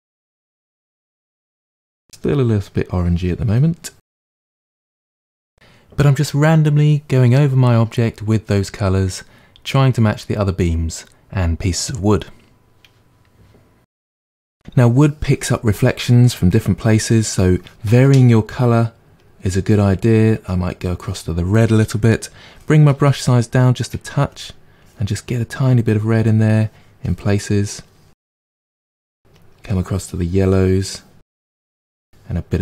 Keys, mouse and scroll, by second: 0.3 middle click, 0.8 click, 1.0 middle click, 1.7 click, 2.0-3.1 middle drag, 3.1 click, 3.5 middle click, 4.0 click, 4.5 middle click, 5.2 click, 5.4 middle click, 5.9 click, 6.1-7.8 middle drag, 7.8 click, 8.3 middle click, 8.5 click, 8.9 middle click, 9.1 click, 9.3 middle click, 9.8 click, 10.1 middle click, 10.5 click, 10.8-12.2 middle drag, 12.2 click, 12.5 middle click, 12.7 click, 13.6-14.6 drag, 19.1-22.4 drag, 22.4 g, 22.9 f, 24.3-26.2 drag, 26.2 middle click, 27.0 click, 27.3-28.3 middle drag, 28.3-29.4 drag, 30.5-32.0 drag, 32.0 middle click.